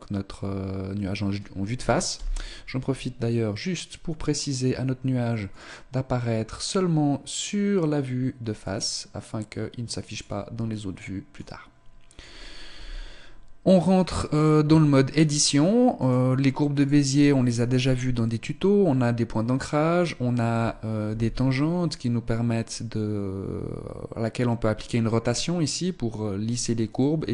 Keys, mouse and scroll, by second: 2.3 n, 3.3 click, 5.6 click, 10.2 click, 11.5 click, 12.8 n, 14.1 right click, 14.8 Tab, 16.1 right click, 16.9 right click, 21.2 r.